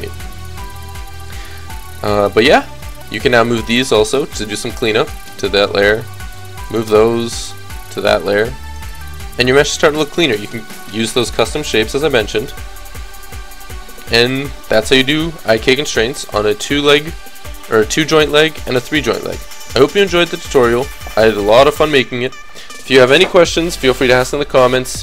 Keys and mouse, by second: 2.1-4.6 drag, 3.8 m, 6.2-7.2 drag, 7.2 m, 11.6-13.4 drag, 15.4 KP_3, 19.6 middle click, 20.3 a, 20.5 a, 20.8 a, 21.3 alt+r, 21.6 alt+g.